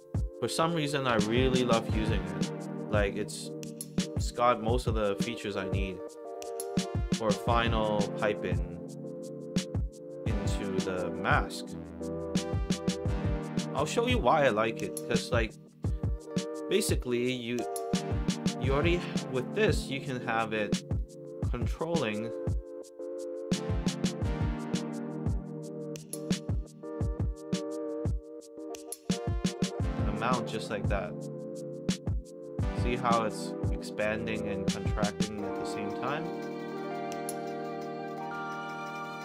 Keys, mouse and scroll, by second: 0.6 Down, 2.6 click, 3.0 click, 3.2 click, 4.5-5.1 drag, 6.6 click, 7.2 click, 7.9-8.3 middle drag, 9.7-11.1 drag, 12.1 click, 13.4 click, 16.8 click, 18.6 click, 18.7 click.